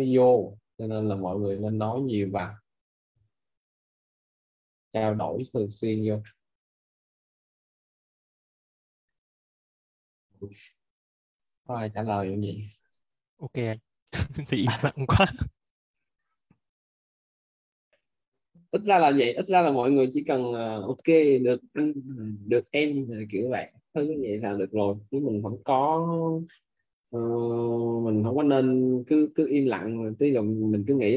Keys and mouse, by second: 7.1 click, 8.8 ctrl+c, 23.9 click, 27.7 click.